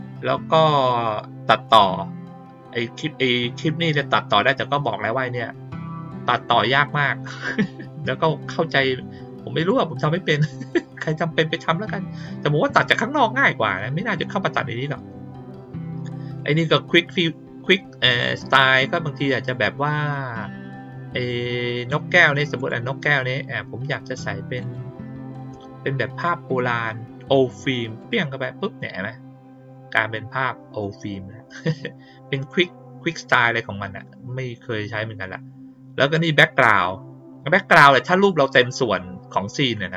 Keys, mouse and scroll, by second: 4.3 click, 9.6 click, 16.3 click, 22.5 click, 24.5 click, 27.9 click, 37.7 click.